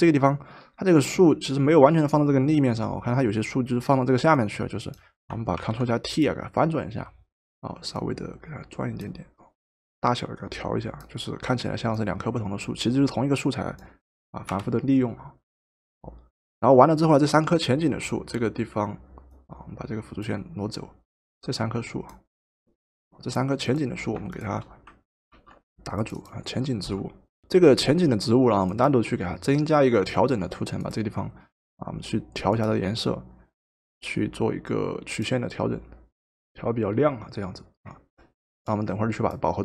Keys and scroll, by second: 5.6 ctrl+t, 14.5 Return, 25.3 ctrl+g, 27.4 Return, 27.4 typing.